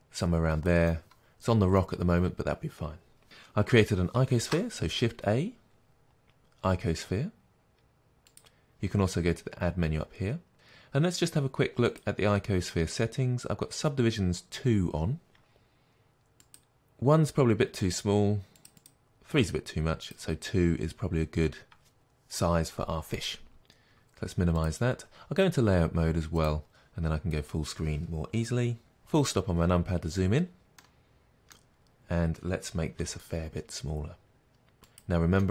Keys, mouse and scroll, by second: 1.0-4.8 middle drag, 4.5 shift+a, 8.5-11.1 middle drag, 24.7 click, 26.4 click, 29.0 KP_Decimal, 30.4 scroll down 1, 30.8-35.5 middle drag, 31.8 scroll up 1, 33.0 s, 35.1 click.